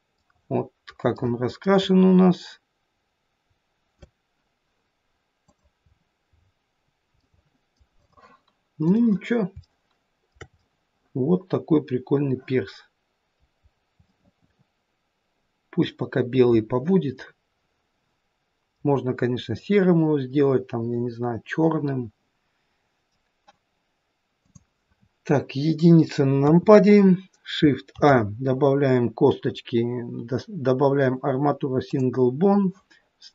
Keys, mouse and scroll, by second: 5.9-6.3 scroll up 3, 6.3-7.2 scroll down 6, 6.8-8.0 scroll up 2, 7.2 middle click, 8.0 click, 8.8 click, 9.7 shift+middle click, 10.2 shift+middle click, 10.6 middle click, 13.6-14.4 scroll up 3, 14.0 middle click, 16.1-16.8 scroll down 1, 19.0 middle click, 19.0-19.6 scroll down 1, 19.6 middle click, 24.5 click, 26.4 KP_1, 28.0 shift+a.